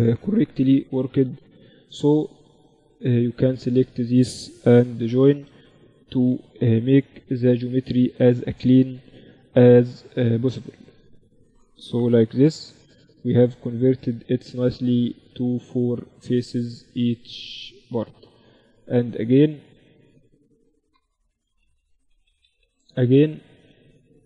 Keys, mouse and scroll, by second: 0.4 z, 2.6-12.4 right drag, 4.2 j, 6.0 j, 9.0 j, 11.4 j, 13.5-15.5 drag, 14.0-17.1 right drag, 18.1 Tab, 20.7-22.2 typing.